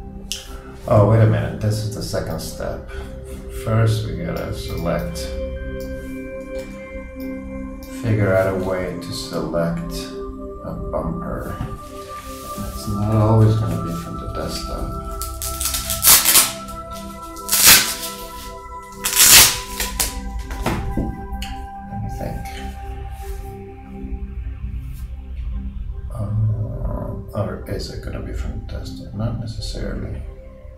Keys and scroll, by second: 6.6 super+g.